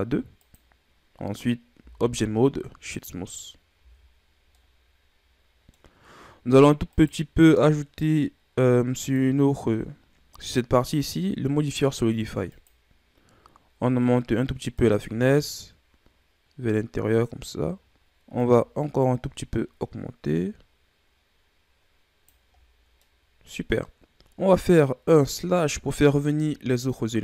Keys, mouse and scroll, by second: 1.7 w, 3.7 a, 4.2 scroll down 1, 4.5-5.9 middle drag, 5.9-6.9 scroll up 2, 6.9 right click, 7.4-8.9 middle drag, 8.9-12.1 drag, 14.7-17.7 drag, 17.9-18.3 scroll up 2, 18.3-21.4 drag, 22.5-23.0 scroll down 2, 23.0-25.2 middle drag, 25.2-26.4 drag, 26.4 KP_Divide.